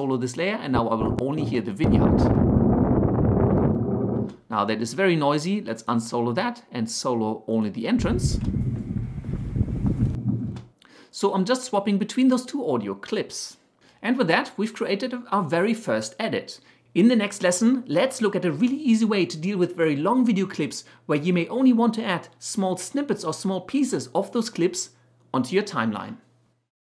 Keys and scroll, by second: 2.1 space, 4.2 space, 8.4 space, 10.6 space.